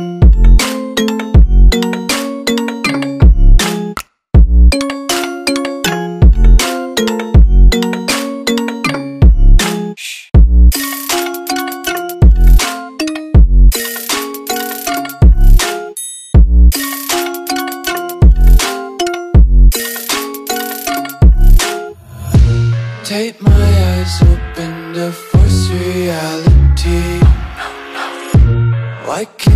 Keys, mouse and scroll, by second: 3.8 click, 7.3 click, 8.9 Delete, 9.7 click, 14.0 ctrl+t, 15.2 click, 16.3 ctrl+t, 17.6 alt+click, 20.1 Return.